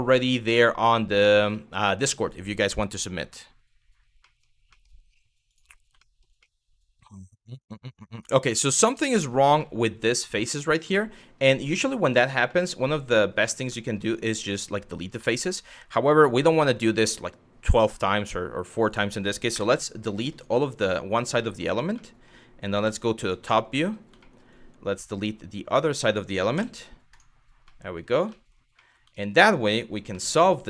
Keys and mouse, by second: 0.3 middle click, 1.2 shift+middle click, 2.4 middle click, 4.0 middle click, 4.4 middle click, 5.1 click, 5.7 shift+middle click, 6.1-7.9 middle drag, 8.8 click, 9.2 middle click, 10.5 shift+middle click, 11.4 middle click, 12.2 middle click, 13.4 middle click, 13.7 click, 14.9 middle click, 15.8 z, 16.7 click, 17.9 click, 19.1 Delete, 20.6 middle click, 21.0 middle click, 21.7 shift+middle click, 22.3 KP_7, 23.2 shift+middle click, 23.9 middle click, 24.2-25.6 drag, 26.2 Delete, 27.3 middle click, 28.0 middle click, 28.5 middle click, 28.8 shift+middle click, 29.7 z.